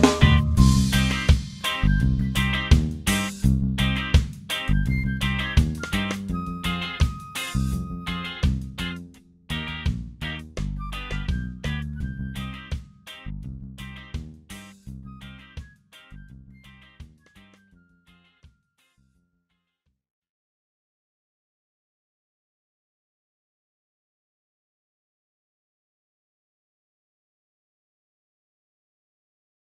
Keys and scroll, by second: 3.6 ctrl+t.